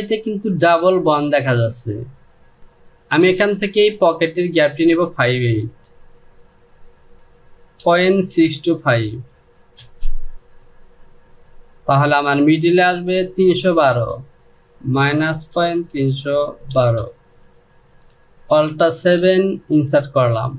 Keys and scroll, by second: 7.4 KP_Decimal, 7.9 KP_6, 8.3 KP_2, 8.6 KP_5, 9.4 Return, 14.6 KP_Subtract, 15.2 KP_Decimal, 15.6 KP_3, 16.4 KP_1, 16.7 KP_2, 17.4 Return, 18.5 alt+7.